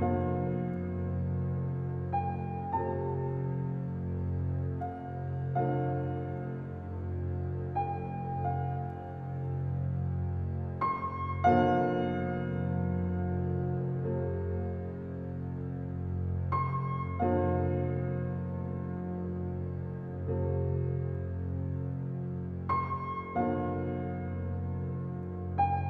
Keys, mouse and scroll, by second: 0.5-5.0 drag, 10.8-12.1 drag, 12.8 Tab, 13.4-13.8 scroll down 1, 13.8-15.5 middle drag, 15.5 click, 16.2-16.7 scroll up 1, 17.1-23.2 drag.